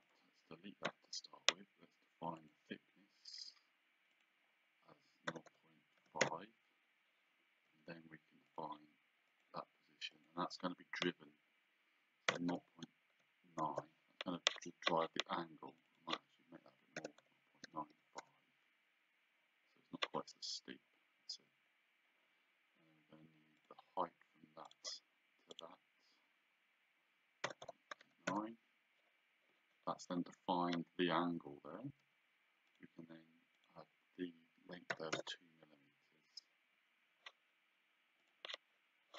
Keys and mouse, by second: 0.1 click, 2.5 click, 4.2 click, 5.4 KP_0, 6.3 KP_Enter, 7.8 d, 8.5 click, 12.4 KP_0, 13.7 Return, 15.8 click, 17.1 KP_0, 18.3 KP_Enter, 23.7 click, 24.8 click, 27.5 KP_0, 27.7 KP_Decimal, 28.1 KP_9, 28.4 Return, 28.4 KP_Enter, 30.7 Escape, 32.1 d, 32.8 click, 35.0 KP_2, 35.2 Return, 38.3 click.